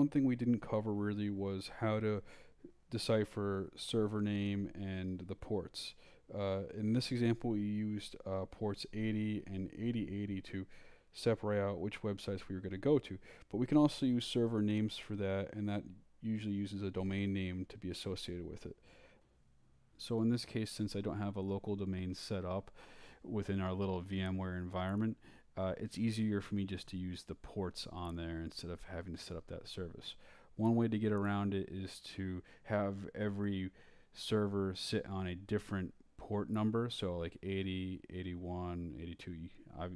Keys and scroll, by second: 2.4-13.8 typing, 14.7 shift+Escape, 15.2 shift+Escape, 15.3-16.2 typing, 16.4 Return, 19.6 Return.